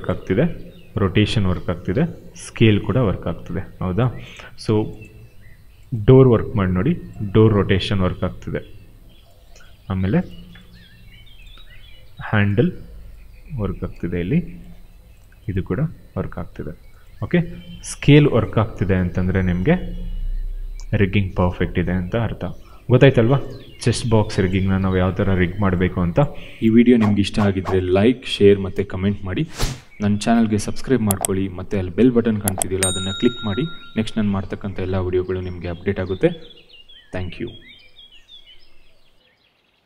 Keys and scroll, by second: 0.3 e, 1.4 ctrl+z, 1.7 r, 3.4 ctrl+z, 6.4 e, 13.8 ctrl+z, 16.4 ctrl+z, 19.0 r.